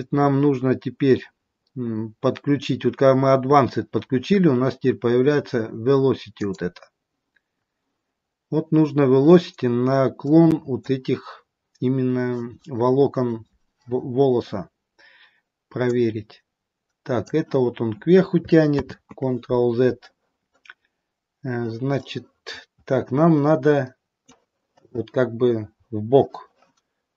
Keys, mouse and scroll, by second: 1.1-2.2 scroll up 5, 4.1-6.1 scroll down 4, 6.2 click, 8.1-9.3 scroll down 2, 9.7 scroll up 1, 10.3 scroll up 1, 10.4 middle click, 15.7 click, 19.2 ctrl+z, 21.9 middle click, 25.4 scroll down 1.